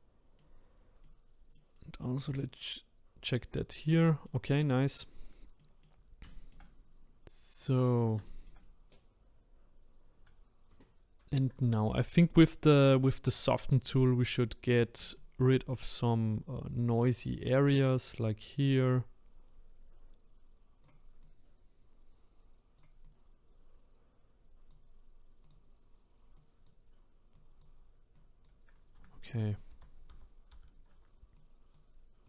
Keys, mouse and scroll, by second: 0.7-1.0 scroll down 1, 1.0 middle click, 1.7 scroll up 2, 2.2-5.2 middle drag, 5.2-5.6 scroll down 1, 5.6-7.6 middle drag, 7.6 click, 8.2 shift+middle click, 8.6-11.4 scroll up 2, 11.4-14.4 drag, 15.1-16.2 shift+middle drag, 16.2-19.2 drag, 21.2-29.7 drag, 29.7 ctrl+z, 30.1 ctrl+z, 31.3-32.2 drag.